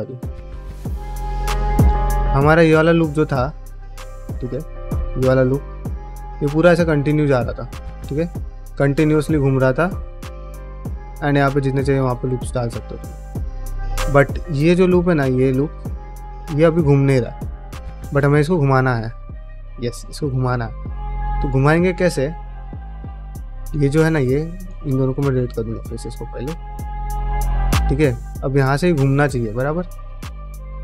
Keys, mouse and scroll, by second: 0.8 middle click, 1.4 middle click, 2.2 middle click, 2.5 middle click, 3.0 middle click, 3.4 middle click, 3.8 middle click, 4.0 middle click, 4.2 3, 4.7 alt+click, 5.0 middle click, 5.6 alt+click, 6.4 alt+click, 6.7-8.4 middle drag, 8.7 middle click, 10.3 middle click, 11.0 middle click, 11.4 ctrl+r, 12.8 right click, 13.4 middle click, 13.7 middle click, 13.9 middle click, 14.7 3, 15.3 3, 15.5 4, 15.9 alt+click, 16.4 middle click, 16.8 middle click, 17.3 middle click, 17.7 middle click, 18.8 ctrl+middle click, 20.1 middle click, 20.5 shift+middle click, 20.8 middle click, 21.4 shift+middle click, 21.7 middle click, 22.1 middle click, 22.7 middle click, 23.3 3, 23.6 click, 23.9 middle click, 24.5 shift+click, 24.9 x, 25.7 middle click, 26.5 1, 26.8 click, 27.1 g, 28.2 click, 28.9 click, 29.1 g, 29.8 click, 29.9 g, 30.5 click, 30.6 g.